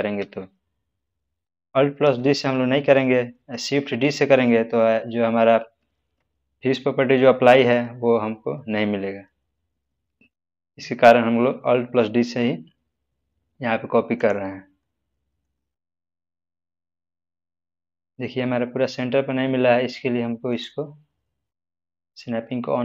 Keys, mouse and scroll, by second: 0.0 click, 0.1 alt+d, 2.0 x, 14.1 click, 14.8-15.4 middle drag, 16.6 click, 20.4 click, 20.5 click.